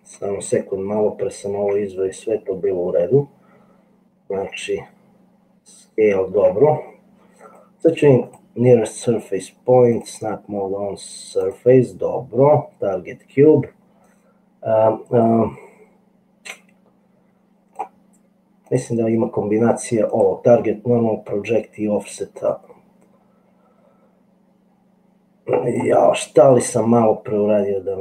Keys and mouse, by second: 1.7 ctrl+z, 4.5 ctrl+z, 7.6-8.6 middle drag, 10.3-11.8 drag, 14.2-17.8 drag, 18.9-20.4 drag, 21.9-25.7 drag, 26.8-28.0 drag.